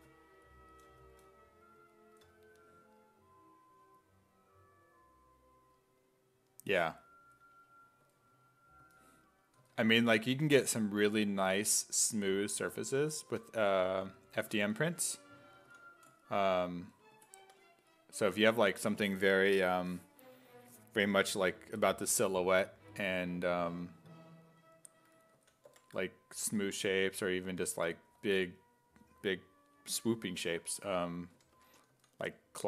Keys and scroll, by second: 8.0 s, 8.8 s, 9.6 s, 10.4 s, 11.7 s, 12.0 1, 13.0 s, 13.3 1, 15.7 s, 17.4 4, 25.4 s, 25.7 5, 27.0 s, 27.6 s, 31.4-32.6 typing.